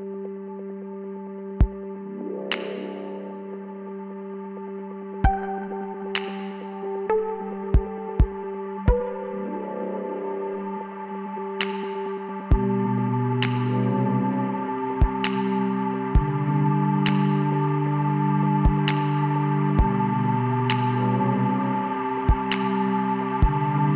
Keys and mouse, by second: 0.4 KP_7, 2.8 shift+d, 4.9-6.8 drag, 6.5-8.7 typing, 9.7 click, 11.5 s, 14.0 KP_1, 15.6 r, 19.7 r, 21.8 z, 23.6-23.9 drag.